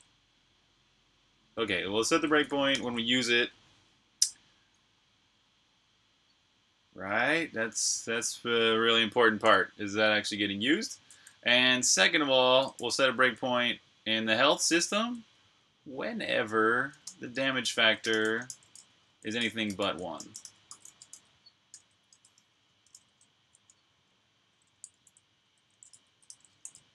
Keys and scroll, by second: 1.4 typing, 2.5 super+\, 3.0-5.2 typing, 6.7 Return, 10.5 super+Tab, 12.6 super+j, 14.8-15.2 typing, 16.9-22.7 typing, 24.3-26.9 typing.